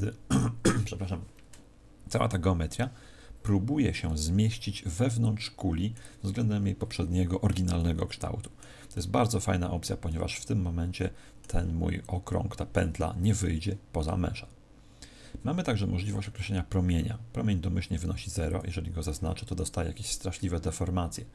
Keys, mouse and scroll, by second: 4.0 middle click, 7.7 middle click, 8.9 middle click, 10.0 middle click, 18.5 click, 20.1 middle click.